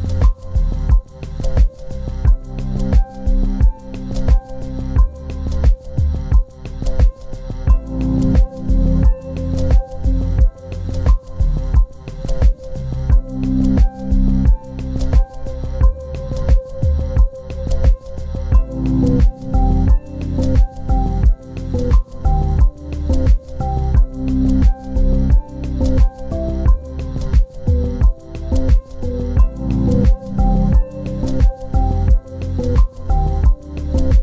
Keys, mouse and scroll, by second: 0.9 ctrl+z, 1.1 ctrl+scroll down 2, 1.6-2.2 scroll up 1, 4.1 right click, 8.7 right click, 13.4 z, 14.9 ctrl+space, 18.0 scroll up 1, 19.4 scroll down 1, 23.9 double click, 24.5 ctrl+z, 30.3 scroll down 1, 31.2 double click.